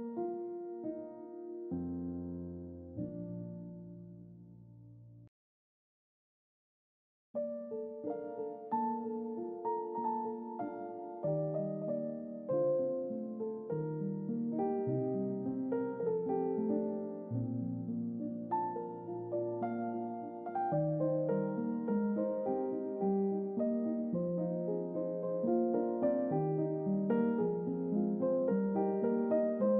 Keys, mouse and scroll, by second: 1.2 scroll up 2, 2.8 click, 4.7 double click, 5.5 1, 5.6 click, 7.7 click, 7.7-8.3 typing, 9.3 click, 10.7 middle click, 10.7-11.3 scroll down 3, 11.1 middle click, 11.8 click, 12.0 typing, 13.3 click, 17.6 click, 19.8 click, 20.2 typing, 20.7 click, 23.9 click, 24.4 typing, 26.0 click, 27.5 click, 27.5 typing.